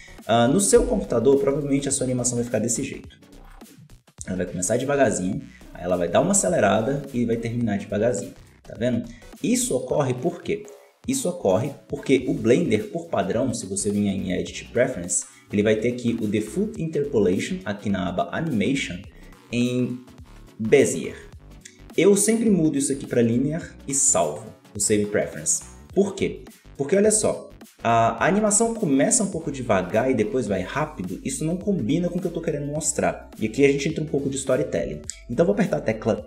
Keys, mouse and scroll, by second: 0.7 t, 2.7-6.5 drag, 8.3-9.7 drag, 9.7-12.8 ctrl+middle drag, 13.3-16.5 drag, 27.5-31.9 drag, 32.0-35.2 drag.